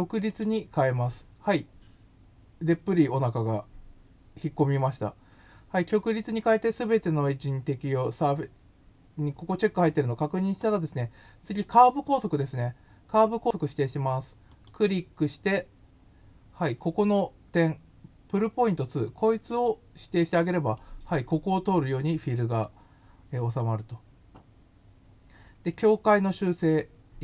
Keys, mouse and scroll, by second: 0.2 click, 14.5 click, 19.5 click, 20.7-22.6 middle drag.